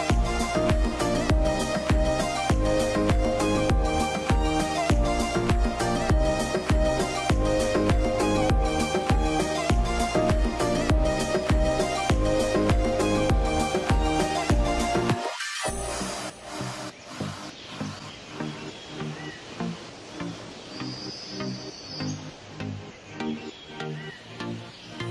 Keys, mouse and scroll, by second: 20.4 s, 20.4 space, 20.8-21.4 scroll down 1, 21.4-23.5 scroll up 1.